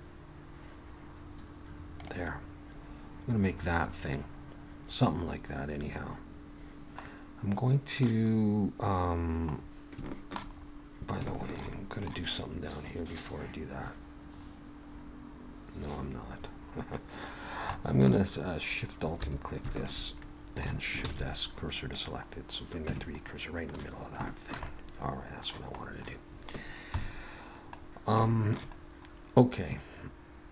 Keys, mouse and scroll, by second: 6.5 middle click, 6.5 click, 6.7 Tab, 7.1 middle click, 9.6-10.0 scroll up 2, 10.1 shift+middle click, 10.6-11.2 scroll up 2, 11.3 shift+middle click, 11.7 middle click, 13.1 click, 13.8-15.9 scroll up 8, 15.9-16.9 scroll down 7, 16.9 middle click, 16.9-18.5 scroll down 3, 17.7 middle click, 19.2 3, 19.7 alt+shift+click, 20.2 middle click, 21.0 shift+s, 22.3-22.9 scroll down 1, 22.9 Tab, 22.9-23.3 scroll down 3, 23.3 middle click, 24.3 shift+middle click, 24.6 middle click, 26.9 KP_3, 27.8-28.2 scroll down 2, 28.2 shift+middle click, 28.8-30.1 scroll up 2.